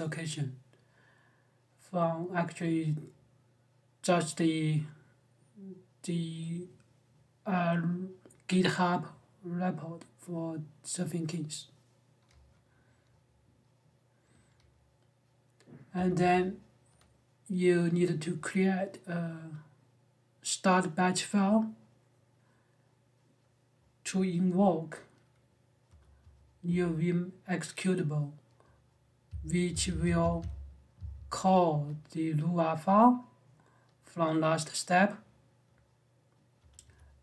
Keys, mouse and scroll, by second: 0.4 typing, 15.7 j, 15.9 j, 25.6-26.4 typing, 29.0-31.2 typing, 36.3 j, 36.6 j.